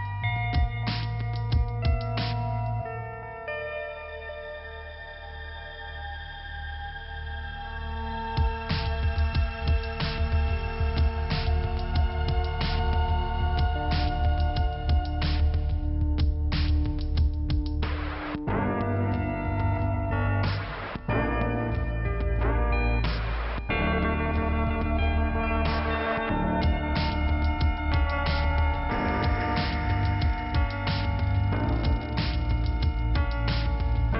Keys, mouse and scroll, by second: 0.2 click, 1.9 click, 2.3 click, 4.5 click, 5.0 click, 10.2 click, 11.7 click, 15.5-16.4 scroll up 2, 16.4 click, 17.7 click, 18.3 click, 19.6 click, 22.3 click, 27.6 click, 32.0 click, 33.3 click.